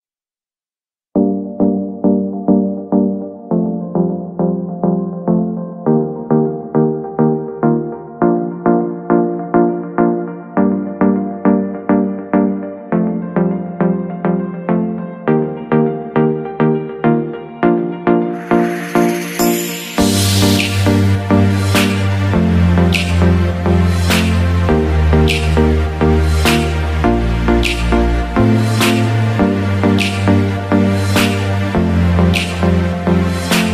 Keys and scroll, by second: 2.4 shift+space, 14.1 shift+space, 19.1 Escape.